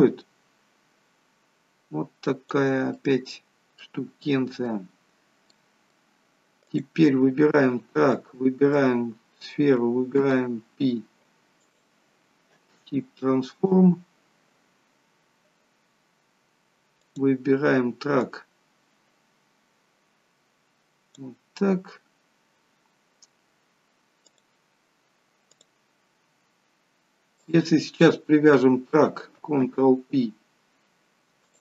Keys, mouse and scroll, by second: 2.8 middle click, 5.1-5.4 scroll up 2, 5.4 middle click, 6.6 click, 8.1 shift+click, 10.1 ctrl+p, 16.0 scroll down 1, 17.0 click, 17.0 scroll down 2, 18.1 click, 22.1-24.2 scroll up 3, 24.2 click, 24.2 scroll up 1, 25.5 click, 27.3 shift+click, 27.8 scroll down 3, 29.5 ctrl+p.